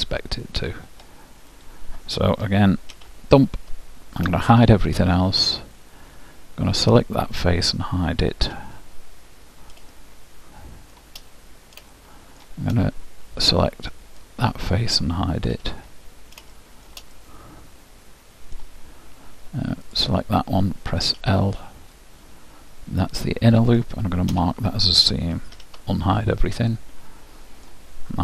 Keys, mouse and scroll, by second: 0.4-1.8 middle drag, 1.8-3.6 drag, 3.0 shift+', 4.6 shift+h, 5.9 middle click, 7.3-9.0 drag, 8.6 h, 10.1-14.0 middle drag, 13.6-15.6 right drag, 15.6 h, 17.3-19.1 middle drag, 20.0-21.8 drag, 21.4 l, 22.2-23.8 middle drag, 25.7 alt+h, 26.9-28.2 middle drag.